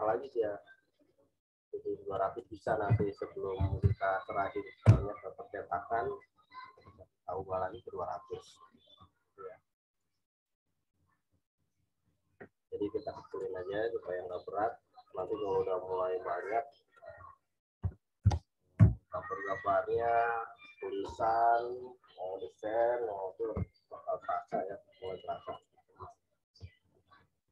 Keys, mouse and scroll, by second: 2.8 2, 4.8 Return, 9.3 right click, 9.9 click, 13.3 click, 17.8 typing, 18.7 Return, 25.0 right click, 25.5 click.